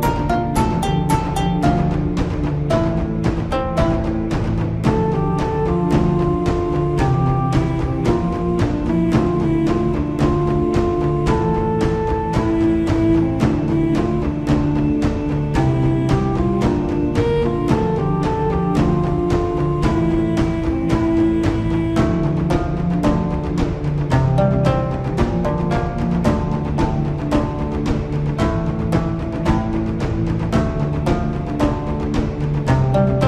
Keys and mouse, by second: 0.0 shift+click, 1.6 ctrl+l, 6.3 click, 8.3 click, 9.7 Tab, 11.3 a, 16.1-21.4 drag, 25.1 middle click, 27.3 Tab, 30.1-31.1 drag, 31.9 click.